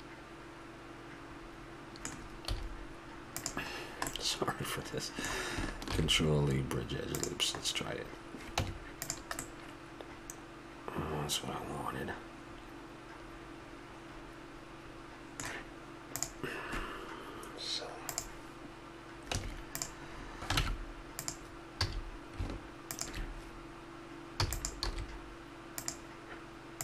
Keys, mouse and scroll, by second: 0.2-2.1 middle drag, 2.5 z, 3.8-5.9 middle drag, 5.9 ctrl+e, 7.6-9.1 drag, 8.6 Tab, 11.3-11.7 middle drag, 19.3 Tab, 20.1-22.1 middle drag, 20.6 ctrl+Tab, 21.8 a, 24.4 e, 24.8 s.